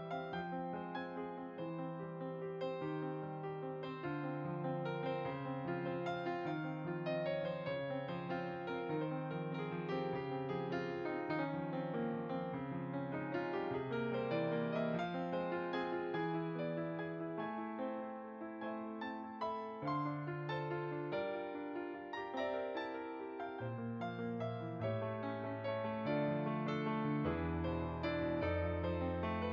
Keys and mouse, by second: 0.8 shift+a, 1.7 click, 2.2 s, 2.9 click, 3.6-4.3 typing, 4.5 click, 7.2 g, 8.1 click, 9.1 click, 11.0 y, 13.5 r, 14.5 typing, 15.1 click, 16.2 middle click, 17.6 click, 19.8 click, 20.4 g, 21.1 click, 22.1 middle click, 24.8 g, 25.2 y, 26.2 click.